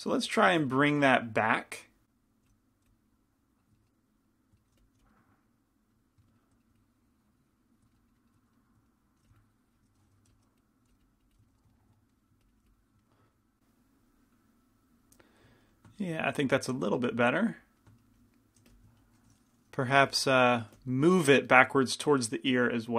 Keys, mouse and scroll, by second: 0.5 f, 0.5 g, 2.4-4.0 drag, 2.5 f, 2.9 f, 4.8 f, 5.1 f, 5.5 click, 8.0-9.5 middle drag, 9.3 f, 9.5 click, 10.4 f, 10.5 middle click, 10.7-12.2 drag, 10.9 middle click, 10.9 f, 11.5-13.0 middle drag, 12.5-13.6 drag, 13.1-18.9 middle drag, 18.9 f, 20.2 f, 20.2 g, 20.9 f.